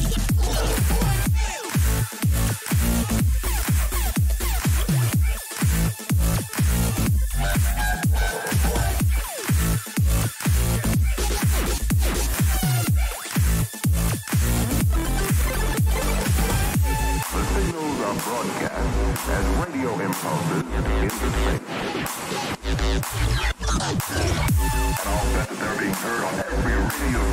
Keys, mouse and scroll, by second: 0.0 middle click, 0.5 click, 1.1-5.6 middle drag, 5.6-7.4 drag, 9.0-13.6 middle drag, 9.0 a, 11.0 Tab, 16.2-21.0 middle drag, 21.3-24.6 middle drag, 23.2 Tab, 24.8-26.0 middle drag, 26.7-27.3 middle drag.